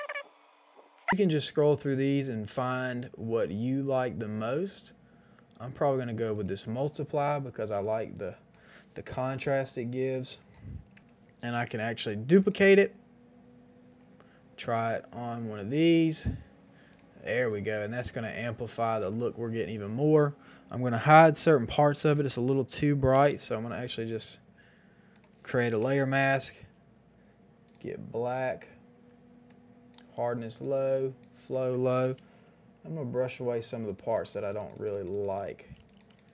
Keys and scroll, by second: 11.6 ctrl+j, 17.8 space, 23.3 b, 25.7 ctrl+i, 35.7 [.